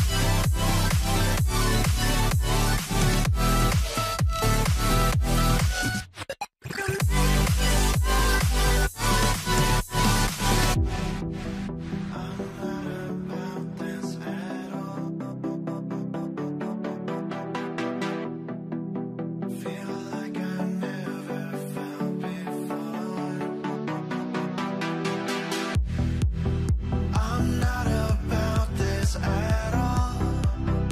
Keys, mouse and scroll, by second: 3.8 ctrl+z, 4.7 alt+click, 5.9 right click, 10.8 double click, 12.5 ctrl+z, 13.3 right click, 17.7 right click, 18.7 double click, 23.5 ctrl+0, 29.7 double click.